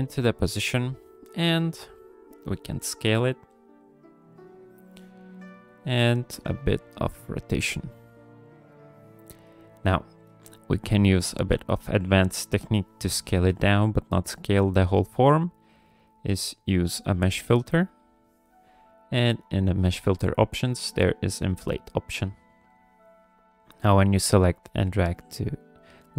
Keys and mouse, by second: 2.6 s, 11.6 click, 13.7 click, 18.0 click, 19.5 click, 20.8-22.5 drag, 24.0-26.1 drag.